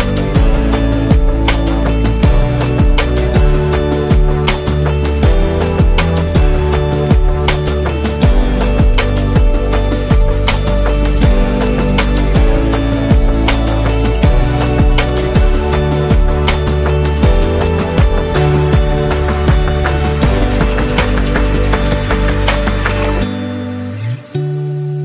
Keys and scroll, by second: 3.7-4.8 typing, 10.4 space, 11.0 space, 13.0 typing, 14.6 super+0, 15.4 z, 16.4 v, 17.5 space, 18.5 z, 19.4 v, 21.3 space, 22.6 t, 24.0-25.0 typing.